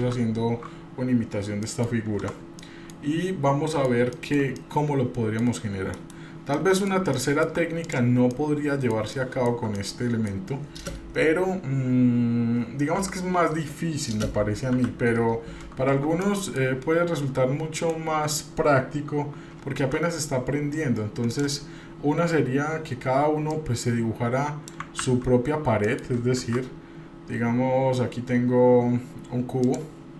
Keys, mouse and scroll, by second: 0.0 ctrl+z, 1.1-1.6 scroll down 1, 1.6 middle click, 2.2 Tab, 2.6 middle click, 2.9-3.6 scroll down 1, 3.7 shift+middle click, 4.7 middle click, 5.9 KP_Divide, 6.5 middle click, 7.1 shift+middle click, 7.9 click, 8.4-9.0 middle drag, 9.1-9.5 shift+middle drag, 9.8-10.3 middle drag, 13.0 Delete, 14.7 KP_7, 16.2-16.6 shift+middle drag, 17.9 shift+right click, 19.8 shift+a, 23.5-24.7 drag, 25.0 ctrl+z, 25.8 middle click, 26.4 shift+a.